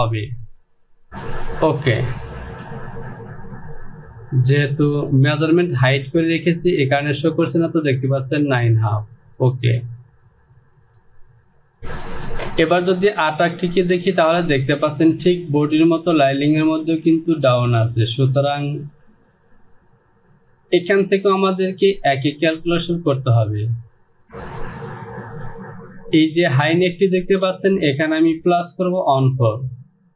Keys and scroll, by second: 0.7 space, 5.1 space.